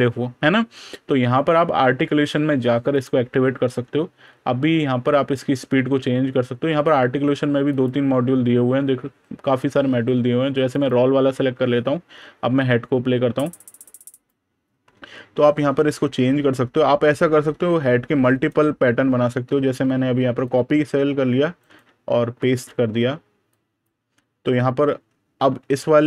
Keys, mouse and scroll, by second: 1.0 super+KP_Add, 2.8 click, 7.5 click, 11.4 super+KP_Subtract, 13.4 click, 15.1 super+KP_Add, 16.2 super+KP_Subtract, 18.2 right click, 19.1 super+KP_Add, 20.3 click, 21.5 right click, 23.3 click, 24.7 super+KP_Subtract, 25.3 super+KP_Add.